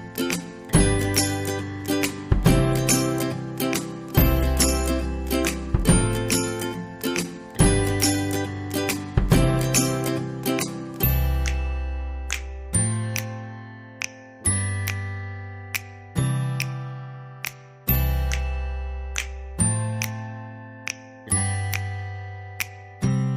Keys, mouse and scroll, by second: 4.0 click, 8.4 click.